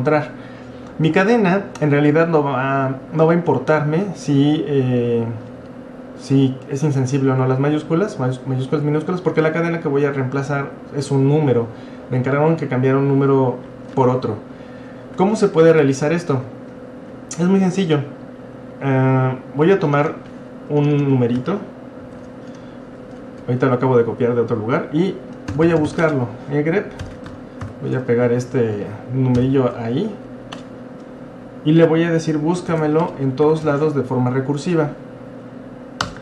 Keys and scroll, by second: 22.0 ctrl+c, 25.2-27.0 typing, 27.7 ctrl+v, 29.2-30.6 typing, 32.7-34.6 typing, 35.8-36.2 typing.